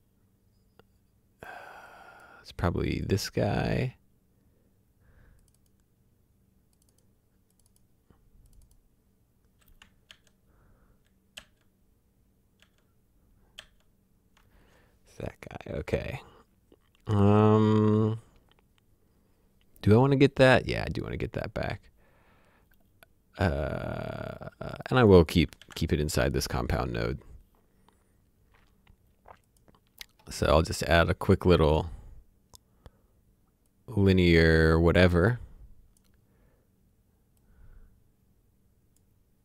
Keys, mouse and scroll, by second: 1.8 click, 5.4 click, 10.1 ctrl+d, 13.6 ctrl+d, 14.4 typing, 23.8 typing, 24.0 click, 25.6 alt+s, 30.1 scroll up 1, 30.2-30.8 scroll down 1, 30.8 click, 33.8 click, 37.5 click.